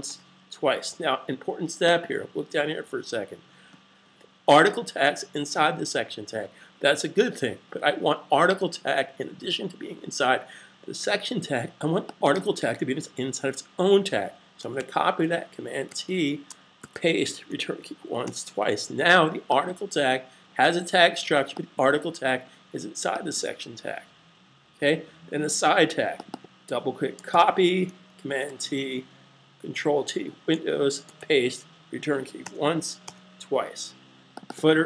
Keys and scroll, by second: 14.6 super+c, 15.6 t, 16.5 super+v, 27.1 super+c, 28.3 super+t, 30.9 super+v.